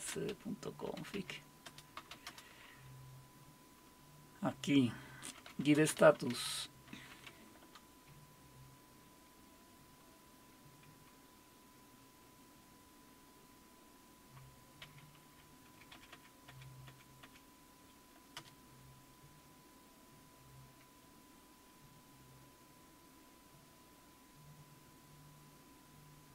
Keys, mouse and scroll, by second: 0.0-2.6 typing, 1.3 Tab, 5.1-7.8 typing, 15.9 Up, 16.1 Up, 16.5 Up, 16.9 Up, 17.2 Up, 18.4 Return.